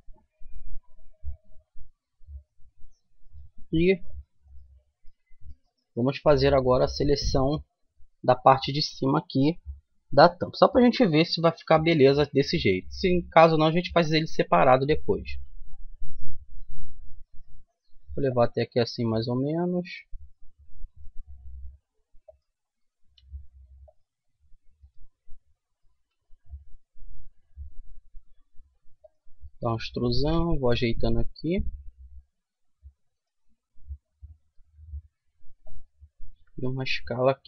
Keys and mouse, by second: 3.3-4.5 right drag, 4.5-5.5 middle drag, 15.3 e, 19.9-21.6 right drag, 20.9 g, 22.8-24.6 right drag, 23.1 g, 24.8-26.6 right drag, 25.9 e, 29.5-31.4 right drag, 30.2 g, 33.1 right click, 33.8-34.9 drag, 34.3 e, 36.3 s.